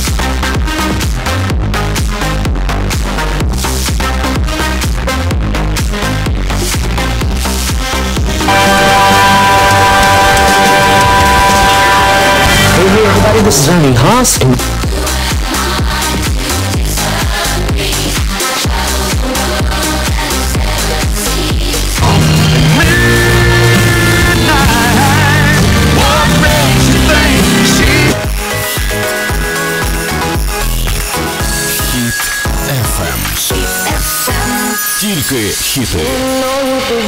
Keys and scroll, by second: 14.5 Page_Down, 28.9 Page_Down.